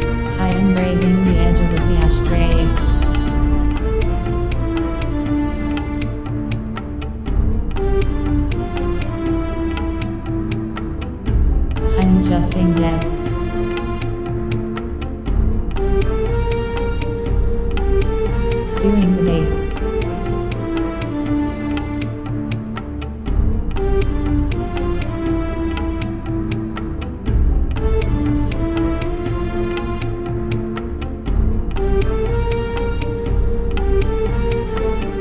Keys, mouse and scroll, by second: 1.2 click, 4.6 click, 5.5-7.6 right drag, 6.2 KP_1, 7.0 z, 9.4 right click, 9.9 KP_1, 10.9 g, 15.0 click, 15.5-17.3 middle drag, 16.5-18.5 right drag, 17.2 z, 17.3 click, 18.1 f, 19.3 i, 21.9 click, 22.6 Return, 23.4 BackSpace, 23.5 BackSpace, 23.8 BackSpace, 25.5 KP_1, 25.9 z, 26.2-27.5 middle drag, 27.6 e, 28.3 g, 32.1 g, 34.5 click.